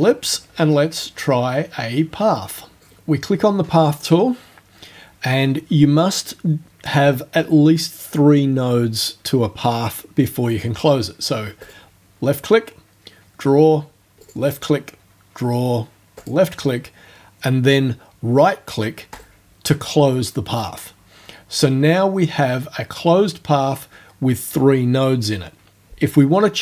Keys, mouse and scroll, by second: 2.8 click, 11.7 click, 14.3 click, 16.2 click, 19.2 right click.